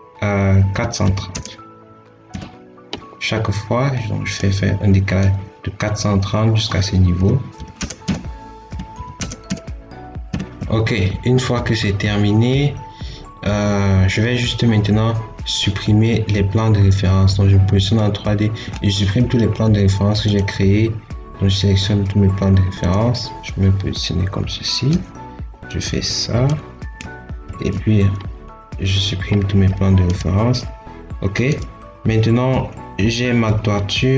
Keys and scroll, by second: 0.6 4, 0.9 3, 1.3 0, 2.1 Return, 7.0-9.0 typing, 7.9 Return, 9.3 Return, 10.1 4, 10.4 3, 10.5 Escape, 13.3 Escape, 27.3 ctrl+x.